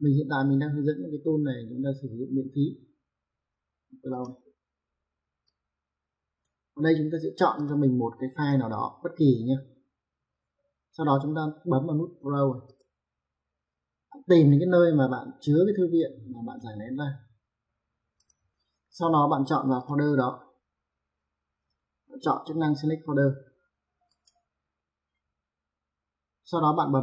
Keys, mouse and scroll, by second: 4.1 click, 5.5 click, 7.6 click, 12.7 click, 16.0 click, 18.2 click, 19.8 click, 24.1 click.